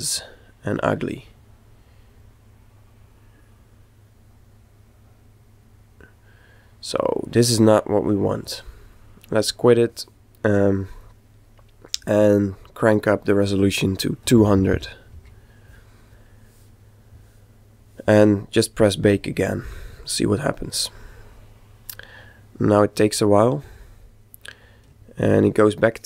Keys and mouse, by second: 8.4 click, 11.2-12.6 middle drag, 12.6 click, 18.9-21.6 drag, 25.1-26.0 ctrl+middle drag.